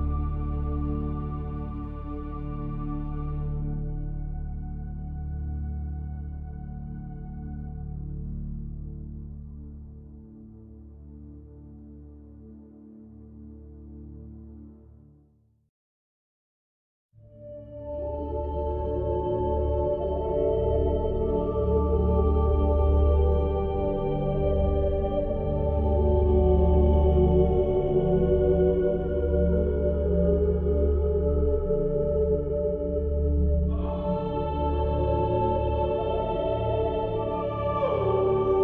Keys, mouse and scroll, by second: 0.4 middle click, 1.1 middle click, 1.8 shift+a, 2.3 s, 3.1 click, 3.7 KP_7, 5.0 click, 5.7 s, 6.6 s, 7.3-8.3 drag, 8.5 KP_1, 9.6 middle click, 11.9 middle click, 12.9 ctrl+b, 14.5 ctrl+z, 14.9 ctrl+b, 16.8 s, 17.6-18.6 middle drag, 18.6 ctrl+r, 20.4 middle click, 21.3 l, 21.7 s, 22.3 middle click, 23.0 click, 24.7 Tab, 25.2 click, 25.6 Tab, 26.5 middle click, 27.3 Tab, 27.6 r, 28.5-29.8 middle drag, 30.4 Tab, 31.1-32.3 middle drag, 32.4 Tab, 33.1 click, 34.5 Tab, 34.7-36.7 middle drag, 36.7 Tab, 37.2 ctrl+r, 38.2 ctrl+r.